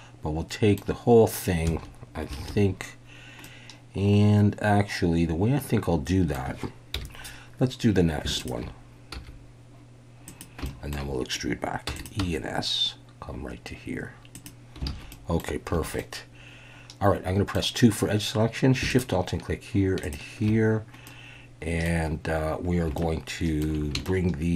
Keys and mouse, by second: 2.4 alt+a, 3.4-6.3 middle drag, 6.9 KP_1, 8.4 alt+shift+click, 9.1 s, 10.3 click, 10.6 shift+drag, 10.8 shift+middle click, 11.9 e, 11.9 click, 12.2 s, 14.3 click, 14.9 alt+a, 15.1 click, 15.7 2, 16.0-17.5 middle drag, 21.1 middle click, 23.0 shift+middle click, 24.0-24.5 shift+middle drag.